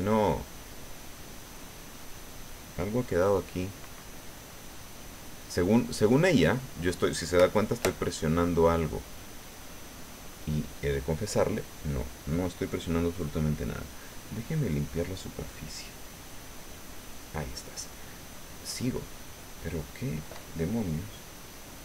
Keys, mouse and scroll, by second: 0.6-2.7 drag, 3.9 click, 4.1 click, 4.4 click, 4.8 click, 5.1 click, 6.0 click, 6.3 click, 8.0 click, 8.3 click, 9.0 click, 9.8 click, 10.3 click, 11.4 click, 13.0 click, 13.3 click, 13.5 click, 17.8 click, 18.9 click, 19.5 click, 19.9 click, 21.2 click.